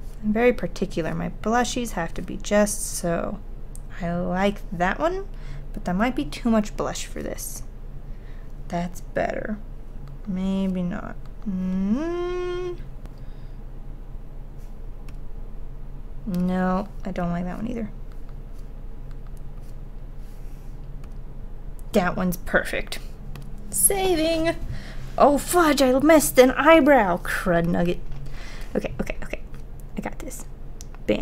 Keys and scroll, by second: 10.9 ctrl+z.